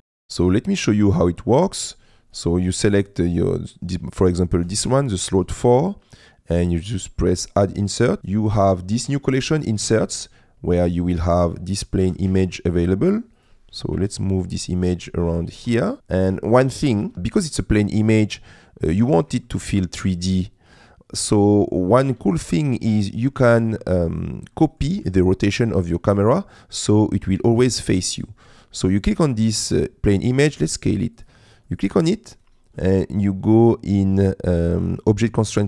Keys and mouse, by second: 0.1 middle click, 0.9 middle click, 7.7 click, 11.4 middle click, 12.0 g, 12.3 shift+z, 13.9 KP_Decimal, 15.3 middle click, 15.6 r, 15.6 z, 19.6-21.8 shift+middle drag, 22.3 shift+middle click, 24.6 middle click, 25.2 shift+middle click, 25.9 middle click, 29.0 click, 30.6 s.